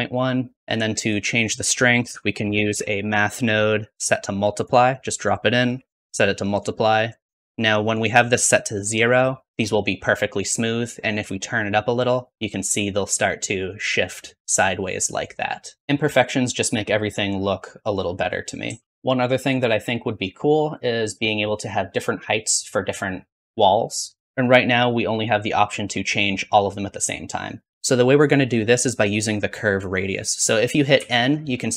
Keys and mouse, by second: 1.8 shift+a, 4.7 click, 4.9-5.6 typing, 11.7-14.3 shift+drag, 15.8 ctrl+space, 19.4-21.0 drag, 26.0-27.7 shift+drag, 27.7 n, 30.9 n.